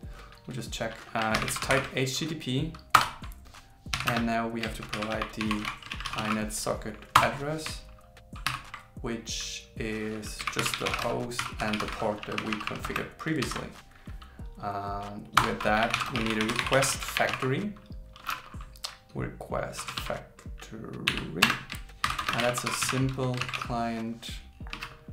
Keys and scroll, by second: 1.1-2.7 typing, 4.9 shift+i, 5.9 shift+s, 8.5 shift+8, 13.4 super+Right, 17.0 shift+f, 22.0 shift+o, 22.3 shift+s, 23.4 shift+c.